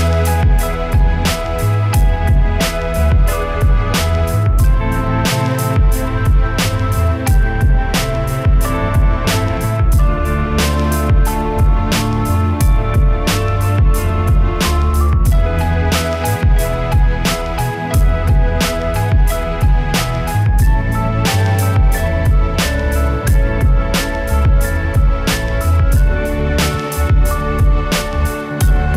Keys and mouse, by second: 0.1 right click, 0.8 middle click, 1.0-2.7 right drag, 2.7 middle click, 2.8 click, 3.6 KP_1, 3.9 click, 4.5 right click, 4.9 click, 5.2 Tab, 5.5 Tab, 6.1 ctrl+KP_3, 6.6 click, 7.2 z, 7.4-8.6 right drag, 8.6 ctrl+KP_3, 8.9-10.0 right drag, 10.0-10.9 typing, 10.8 click, 12.0 ctrl+z, 12.1 ctrl+z, 12.4 e, 12.6 s, 12.9 s, 13.1 click, 15.1 click, 15.8-23.2 typing, 16.3 click, 17.8 middle click, 18.5 click, 19.1 click, 19.9-20.2 drag, 20.3 ctrl+KP_3, 21.2 click, 21.7 ctrl+z, 22.7 click, 23.4-24.5 drag, 24.5 e, 24.8 click, 25.2 s, 25.6 click, 27.5 e, 27.6-28.9 drag.